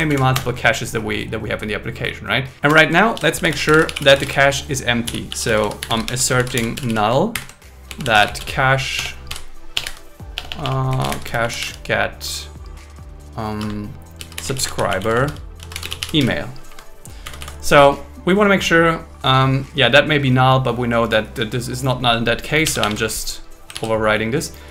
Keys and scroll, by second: 0.1 super+Right, 0.3 Return, 2.7 Return, 3.1 shift+a, 6.4 shift+n, 7.3 shift+8, 9.0 Delete, 13.6 Return, 16.6 Escape, 17.2 Right, 22.6 shift+1, 23.7 super+s.